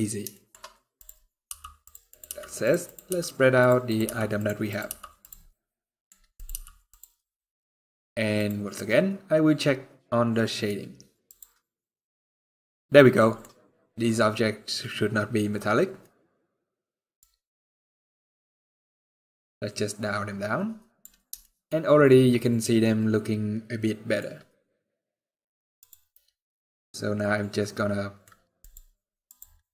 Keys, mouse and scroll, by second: 0.0 shift+middle click, 0.3 scroll up 2, 0.7 click, 1.0 scroll down 1, 1.2 g, 1.8 click, 2.0 g, 2.6 click, 2.8 g, 3.6 click, 3.8 g, 4.4 click, 4.7 g, 5.2 middle click, 6.1 click, 6.3 g, 25.6 click, 26.1 middle click, 28.3 click, 29.3 middle click.